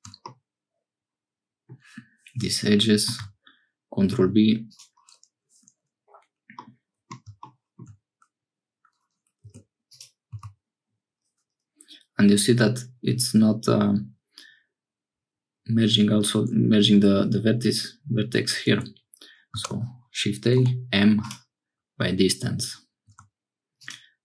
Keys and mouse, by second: 0.2-1.8 middle drag, 3.1 ctrl+b, 6.6 middle click, 9.4 1, 9.9 click, 10.3 g, 20.5 m, 23.1 1, 23.8 click.